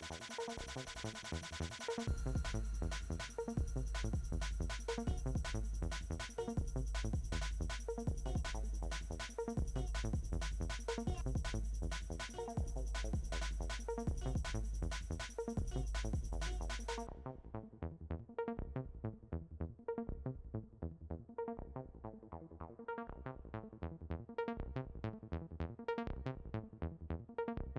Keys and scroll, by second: 16.3 s.